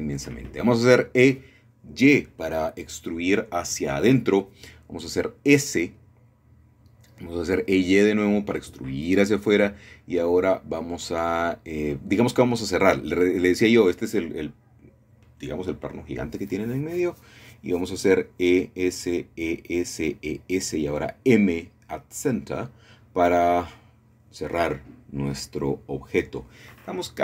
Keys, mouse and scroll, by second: 0.7 middle click, 1.5 typing, 5.6 click, 6.3 typing, 8.7 shift+click, 9.3-10.1 typing, 15.1 shift+click, 16.1 middle click, 16.9 shift+middle click, 17.4 shift+middle click, 17.8 e, 18.0 s, 20.7 click, 21.0 e, 21.2 s, 22.1 click, 22.2 typing, 23.5 click, 25.2 m, 26.3 click.